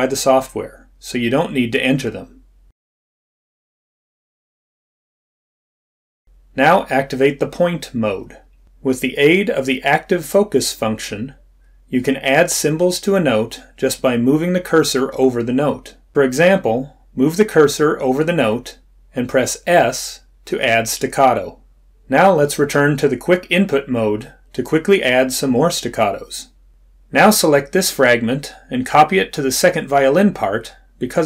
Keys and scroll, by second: 12.4 s, 26.9 s.